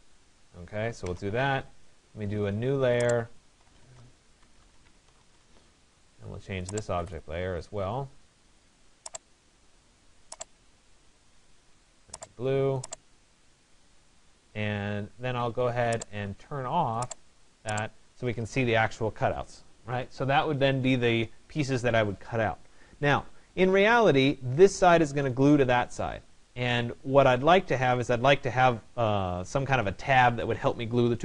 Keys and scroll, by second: 0.7 Return, 17.9 Escape.